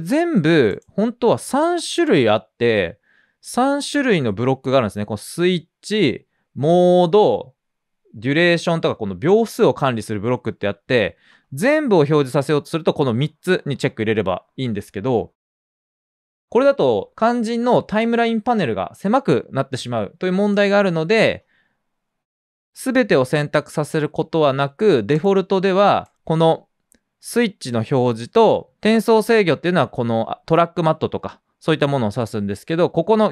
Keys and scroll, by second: 14.6 typing, 30.8-31.7 typing.